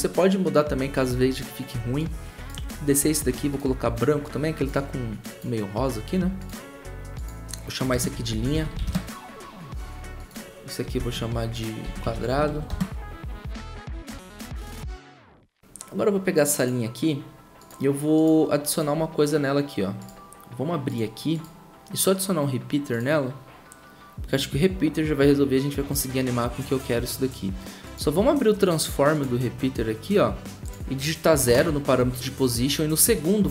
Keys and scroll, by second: 7.9 Return, 8.0-9.3 typing, 10.9 Return, 11.6-13.0 typing, 31.3 typing, 31.5 Return.